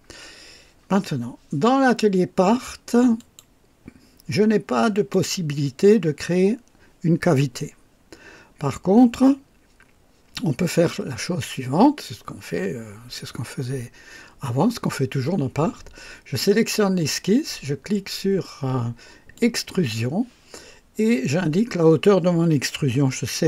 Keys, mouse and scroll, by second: 3.2 click, 4.9 click, 19.4 click.